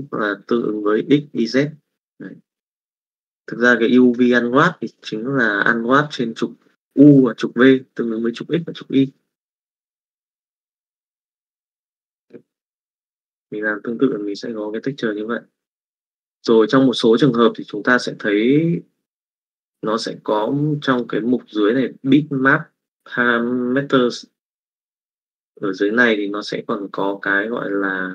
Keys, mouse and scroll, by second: 11.4 middle click.